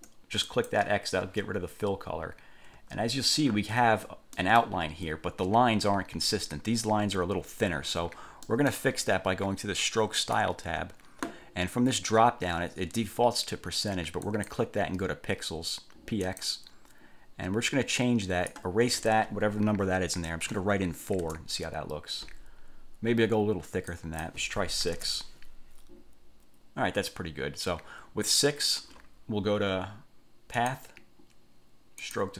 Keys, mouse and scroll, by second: 0.6 click, 3.0-3.4 ctrl+scroll up 2, 3.6 ctrl+scroll down 2, 4.5 click, 4.9 ctrl+scroll up 2, 8.6 middle click, 10.4 click, 14.4 click, 16.4 click, 17.8 click, 20.7 4, 21.4 Return, 24.1 click, 25.0 6, 25.2 Return, 30.8 click, 32.2 click.